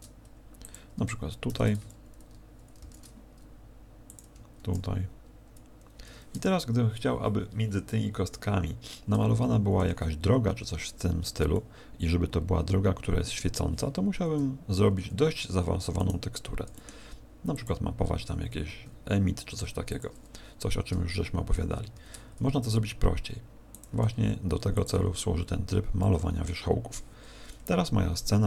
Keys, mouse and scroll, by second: 0.7 click, 1.4 shift+d, 4.1 click, 9.1 Tab, 9.8 Tab, 11.5 middle click, 14.2 KP_0, 16.0 right click, 16.6 g, 17.6 click, 18.8 r, 20.0 click, 21.9 shift+f, 23.8 click, 24.0 g, 24.8 click, 25.1 scroll up 5, 26.0 middle click.